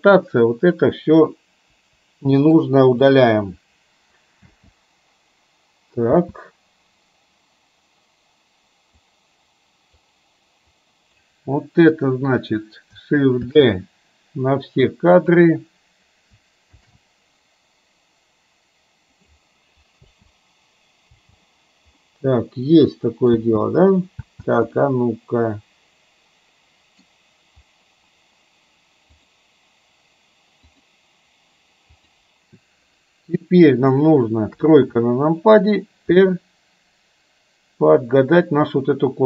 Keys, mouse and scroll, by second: 0.0-0.9 drag, 1.9 Delete, 2.6-3.1 drag, 3.6 Delete, 4.5 space, 6.2 space, 9.1-10.2 drag, 10.7-11.4 drag, 13.6 shift+d, 16.9 shift+d, 20.1 space, 21.1 space, 22.1-23.5 middle drag, 23.5 space, 24.2 space, 24.7-27.1 middle drag, 29.4 click, 30.7 click, 32.1 click, 33.6 middle click, 34.6 KP_3, 36.2 r.